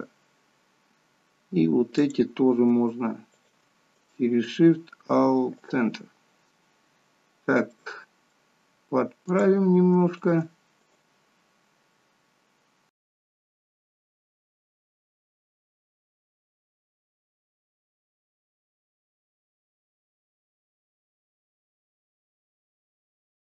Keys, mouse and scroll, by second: 2.0 click, 3.3 shift+click, 3.9 right click, 7.8 middle click, 9.3 click, 10.2 shift+click, 10.8 right click, 13.5 shift+click, 13.8 shift+click, 14.5 right click, 15.6 ctrl+z, 16.0 click, 17.2 shift+click, 17.4 right click, 18.1 shift+middle click, 18.5 scroll down 2, 18.7 middle click, 20.0 click, 20.3 shift+click, 20.6 right click, 22.1 click, 22.5 shift+click, 22.7 right click.